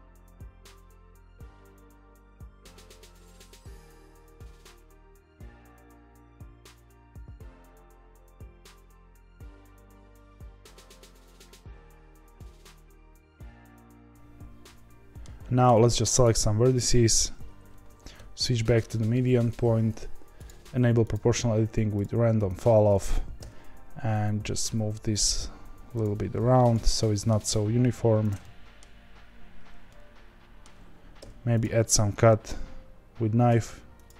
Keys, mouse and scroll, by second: 0.5 ctrl+b, 2.4-5.0 typing, 2.5 click, 3.2 click, 3.7 click, 3.8 middle click, 4.5 middle click, 5.1 click, 5.6 KP_Divide, 5.8 middle click, 6.4 3, 6.4 click, 6.7 i, 7.8 i, 8.4 e, 8.8 ctrl+z, 9.1 g, 9.6 1, 9.9 click, 10.0 ctrl+b, 10.9 ctrl+t, 11.1 click, 11.2 g, 11.7 middle click, 12.3 click, 12.4 ctrl+b, 12.9 ctrl+t, 13.0 click, 13.2 g, 13.6-15.2 middle drag, 15.2-16.2 scroll down 1, 16.2 click, 18.9 ., 20.3-23.3 drag, 23.3 g, 26.7 click, 27.0 middle click, 27.4 g, 28.4-31.1 middle drag, 31.1 k.